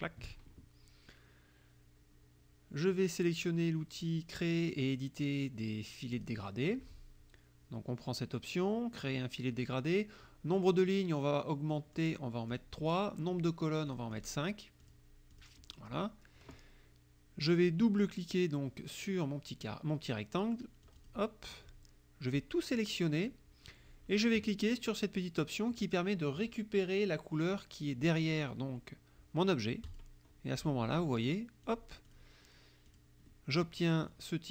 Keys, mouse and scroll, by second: 6.2 click, 12.0 click, 12.5 click, 13.9 click, 14.8 click, 15.3 click, 20.9 click, 22.4-23.5 drag, 29.9 click, 31.8 click, 32.1 click, 33.0 click, 33.3 middle click, 34.2-34.5 drag.